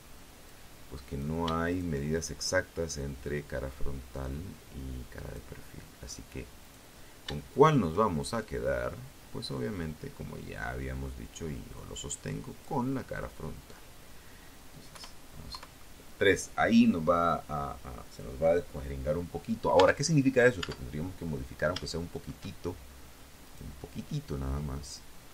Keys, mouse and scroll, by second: 0.6-3.7 drag, 4.7 right click, 5.7 shift+right click, 6.5-10.9 shift+drag, 11.2 scroll down 2, 11.9 scroll down 2, 13.1 KP_1, 13.7 KP_3, 18.0 Tab, 18.5 right click, 18.8 Tab, 19.5-19.8 scroll up 1, 20.0 shift+right click, 21.6 right click, 24.6-25.3 drag.